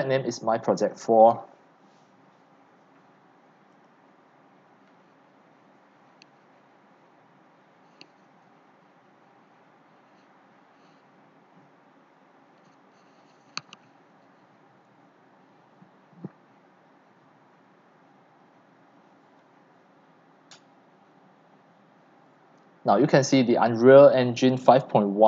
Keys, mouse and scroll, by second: 0.8-3.5 drag, 4.0 click.